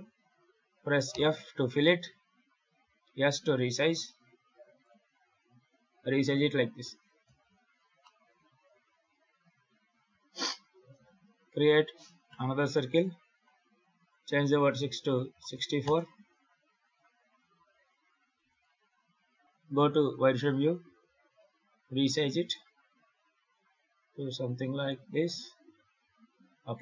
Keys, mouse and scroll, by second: 1.0 f, 2.7 s, 5.2 KP_7, 6.0-6.5 scroll down 4, 6.4-7.1 scroll up 3, 7.1 Tab, 7.5-7.9 scroll down 3, 7.9 middle click, 8.8 KP_7, 9.3 scroll up 4, 10.6 shift+a, 13.2 click, 13.9 click, 16.7 click, 17.3 s, 18.5 z, 20.7 s, 25.2-26.0 scroll down 4, 26.0 scroll down 3, 26.6 s.